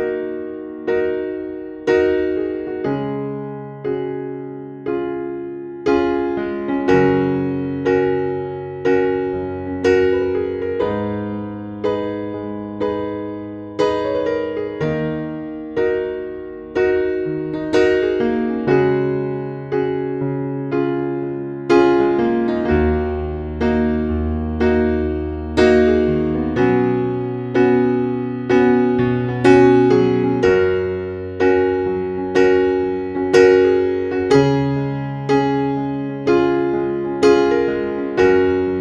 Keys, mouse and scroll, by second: 3.5-4.5 scroll down 1, 4.5-5.0 scroll up 1, 5.8 click, 6.7 scroll up 1, 9.1-9.5 scroll down 1, 11.6 scroll up 1, 12.4-12.9 scroll down 1, 13.1-14.4 scroll up 1, 15.3 scroll down 1, 17.2-18.5 scroll up 1, 18.5 Page_Down, 19.6-20.1 scroll up 1, 23.5-24.3 scroll down 1, 25.4-25.8 scroll up 1, 26.1 scroll down 1, 27.2-27.6 scroll up 1, 27.9-28.3 scroll down 1, 29.0-31.5 scroll up 1, 31.5-32.7 scroll down 1, 32.8 scroll up 1, 34.1 Page_Down, 35.2 scroll up 1, 37.2 scroll down 1, 38.5-38.8 scroll up 1.